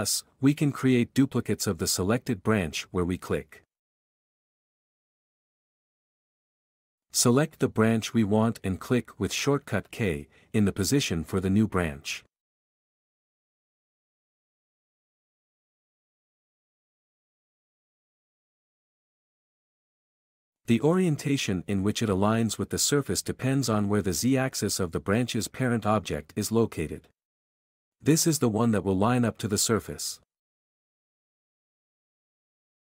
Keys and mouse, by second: 0.3 s, 1.4 s, 1.5-2.6 drag, 2.6 k, 3.3 k, 3.7 s, 4.9 k, 5.3 s, 5.5 click, 5.8 q, 6.2 alt+click, 10.3 k, 14.8-17.6 typing, 15.7 click, 25.4 j, 27.8 k, 29.1 alt+z, 32.8 alt+z.